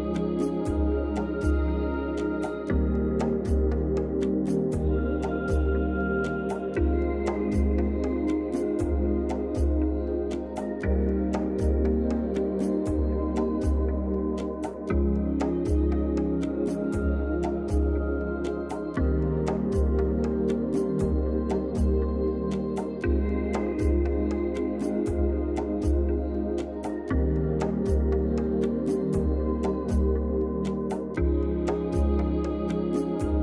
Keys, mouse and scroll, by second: 3.0 ], 3.2 ], 3.7 click, 7.6-8.6 typing, 8.9 click, 13.9 click, 18.5 click, 19.5 ctrl+-, 21.2 click, 31.4-33.4 drag.